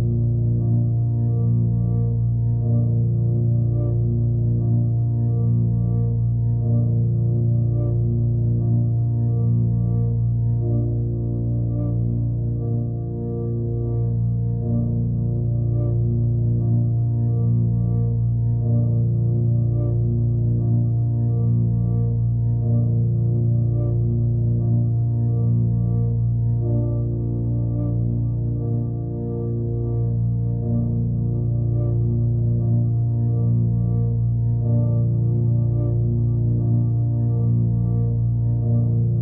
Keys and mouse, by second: 0.3 click, 1.5-2.5 drag, 3.1-4.9 alt+middle drag, 7.4 click, 8.9-11.1 shift+drag, 11.5 ctrl+z, 13.3 click, 15.9 click, 16.1-17.6 drag, 19.3-20.5 drag, 21.4 alt+middle click, 22.2 middle click, 22.5 alt+middle click, 26.5 ], 26.7 [, 27.1 ], 27.6 ], 28.2-34.7 drag, 35.6 middle click, 36.0 middle click, 36.7-39.2 alt+middle drag.